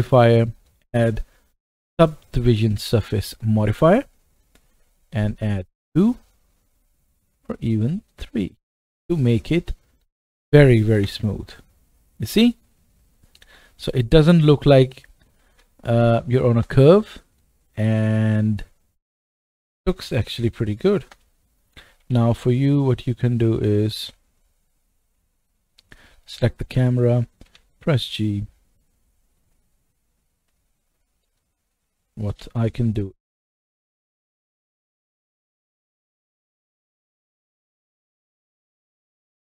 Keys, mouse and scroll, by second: 0.5-9.1 drag, 9.0 middle click, 10.3-11.0 scroll up 1, 11.0 KP_0, 16.5 KP_0, 17.4 middle click, 21.0 KP_0, 21.5-26.3 middle drag, 22.0 g, 26.3-29.6 drag, 27.5 g, 29.6-38.1 right drag, 32.3 r, 34.7 r, 38.1 middle click, 38.6-39.5 right drag.